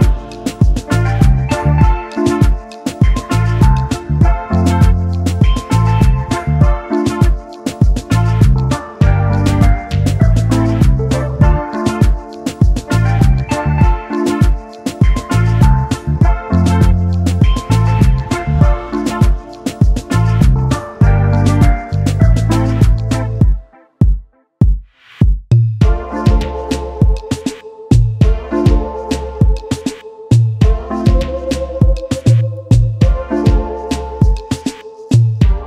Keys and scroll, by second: 4.4 ctrl+s, 9.4-10.6 typing, 15.9-17.4 typing, 17.5 Return, 22.8-24.5 typing, 26.2-27.3 typing, 31.3-32.7 typing, 33.1 Return.